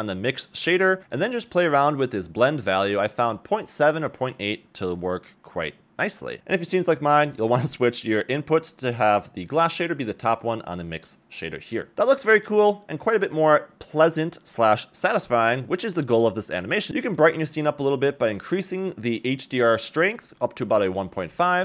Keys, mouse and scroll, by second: 1.0 middle click, 1.0 scroll up 2, 1.1 click, 1.7 click, 5.8 scroll up 2, 7.4-8.5 drag, 9.4 a, 9.6 a, 10.0-10.6 middle drag, 16.1 click, 16.1-16.6 scroll down 2, 16.6 click, 18.0 middle click, 19.0 click, 19.3 click, 19.8 click.